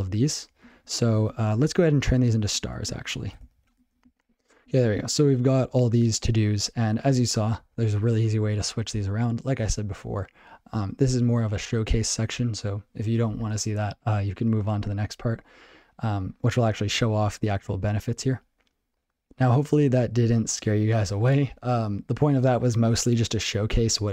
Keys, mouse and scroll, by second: 0.0 ctrl+n, 0.2 ctrl+n, 0.3 ctrl+n, 0.6 ctrl+g, 0.7 ctrl+p, 0.9 ctrl+p, 1.0 ctrl+p, 2.3 ctrl+p, 2.9 ctrl+n, 3.9 ctrl+n, 4.0 ctrl+s, 4.7 ctrl+p, 4.8 ctrl+p, 5.0 ctrl+p, 5.2 ctrl+p, 5.5 ctrl+n, 5.7 ctrl+n, 5.9 ctrl+n, 13.5 ctrl+p, 13.7 ctrl+p, 21.2 ctrl+p, 21.6 ctrl+p.